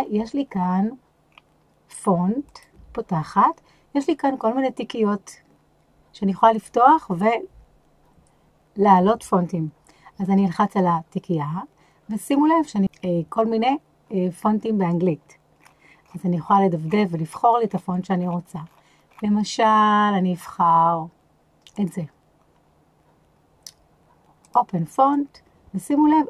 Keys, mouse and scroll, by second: 0.0-0.6 scroll up 4, 1.2 scroll down 2, 2.4 click, 10.2 click.